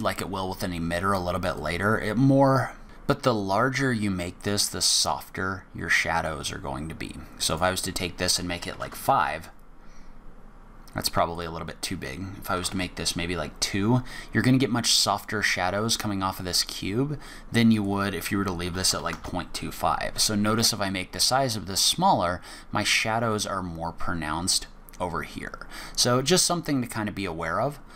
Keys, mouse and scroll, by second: 1.5 click, 7.5 click, 11.3 click, 17.7 click.